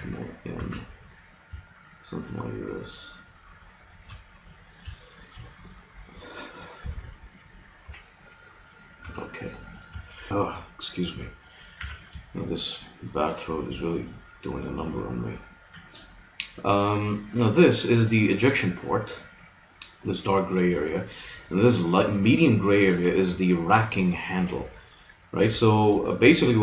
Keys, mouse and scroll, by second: 0.5 s, 4.9-7.1 middle drag, 7.3-8.6 middle drag, 7.9 KP_1, 9.1 KP_3, 9.9 middle click, 11.7 a, 12.3-13.9 middle drag, 21.7-23.3 middle drag, 25.6-26.6 middle drag.